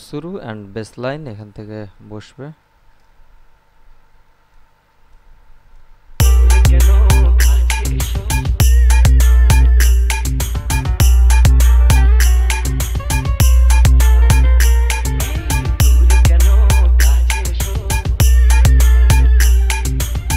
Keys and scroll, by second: 6.5 space.